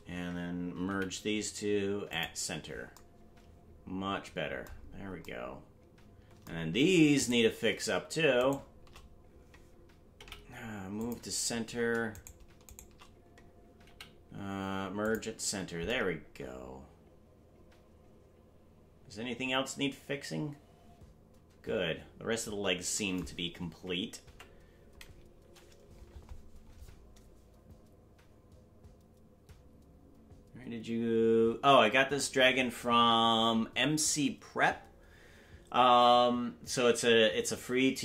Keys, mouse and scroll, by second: 0.8 m, 4.7-7.1 scroll down 4, 7.1 right click, 8.4-9.9 shift+right drag, 10.1 m, 12.1-13.4 right drag, 13.8 m.